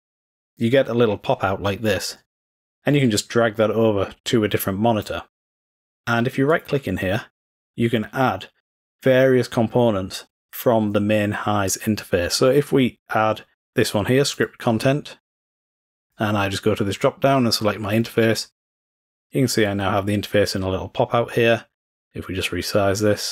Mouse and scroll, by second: 0.9-5.2 drag, 6.5 middle click, 6.7 middle click, 6.7 scroll down 1, 14.4 middle click, 16.0 middle click, 16.2 click, 17.9 click, 19.1-21.7 drag, 22.3-23.3 drag.